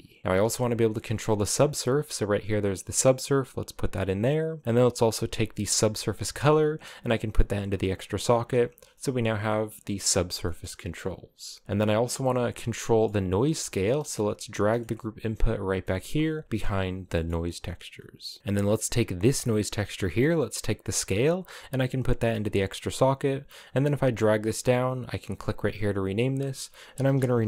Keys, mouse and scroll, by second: 0.2 scroll down 8, 0.5 middle click, 1.0-2.7 scroll up 1, 2.7 click, 5.8 drag, 7.6 click, 9.1-11.6 middle drag, 11.6 scroll down 4, 11.7 drag, 11.9 middle click, 12.2 scroll down 2, 12.5 middle click, 13.1 g, 13.6 middle click, 14.0 scroll up 4, 14.4 middle click, 14.6 g, 15.5 middle click, 16.4 scroll down 1, 16.8 middle click, 17.0 scroll up 1, 18.4 middle click, 18.9 click, 20.6 click, 23.3-25.1 drag, 25.2 click, 25.5 click, 25.7-27.4 drag.